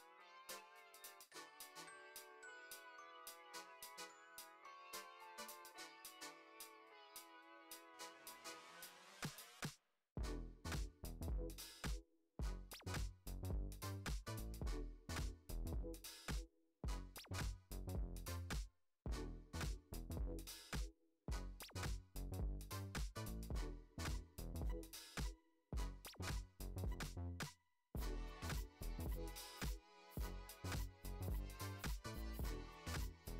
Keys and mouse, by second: 0.0 g, 1.5-1.9 middle drag, 2.3 ctrl+Tab, 2.9 click, 3.4-3.7 middle drag, 4.3 drag, 4.9 s, 5.9 g, 7.3 s, 9.1 g, 11.0-11.6 middle drag, 12.1 g, 13.2 click, 13.4 middle drag, 14.1 s, 15.6-16.0 middle drag, 16.6 middle click, 17.0 g, 18.7 middle click, 19.4 shift+d, 21.7 KP_7, 22.5 r, 23.2 g, 25.2 r, 25.7 g, 26.1 r, 26.7 middle click, 27.4 click, 27.8-28.2 middle drag, 28.4 shift+middle drag, 28.8 middle click, 30.5 shift+a, 31.7 g, 32.6 g.